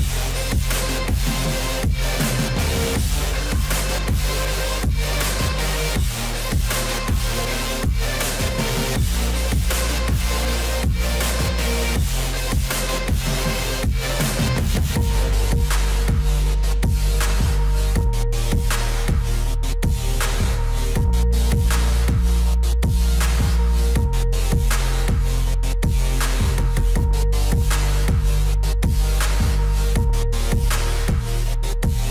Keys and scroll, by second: 6.2 F4, 14.6 F4, 27.7 F4.